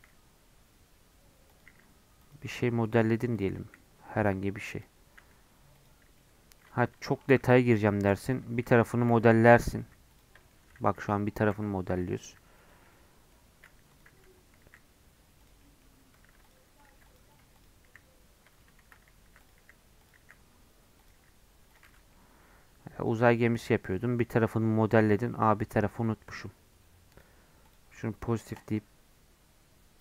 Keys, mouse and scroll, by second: 1.7 e, 2.5 scroll down 1, 2.6 middle click, 3.0 e, 3.6 s, 5.1 s, 6.1 middle click, 6.6 scroll up 1, 6.9 middle click, 7.4 Tab, 7.6 3, 7.9 Tab, 8.1 3, 8.2 click, 9.1 i, 9.8 e, 10.4-11.5 middle drag, 11.5 i, 12.2 e, 12.9-13.9 middle drag, 13.9 click, 14.6 e, 15.6 middle click, 16.3 ctrl+r, 16.9 ctrl+r, 17.5 click, 17.8 e, 19.3 3, 19.4 click, 19.6 e, 20.2 s, 21.1 e, 21.8 Tab, 21.9 scroll down 2, 22.1-23.1 middle drag, 23.1 scroll up 5, 23.3 middle click, 23.7 scroll down 6, 23.9 middle click, 24.6 scroll up 6, 25.1 scroll down 1, 25.3-27.1 middle drag, 27.1-30.0 drag.